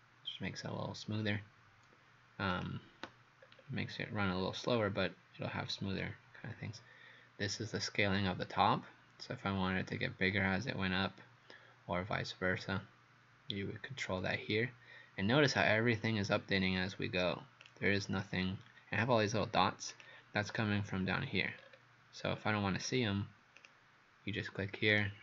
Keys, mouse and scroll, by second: 3.5-4.3 scroll down 2, 4.3-5.7 scroll up 5, 6.0 click, 20.5 scroll down 4, 21.6-22.0 scroll up 4, 22.2 scroll down 4, 22.9-23.6 scroll up 3, 23.6 click, 24.9 right click.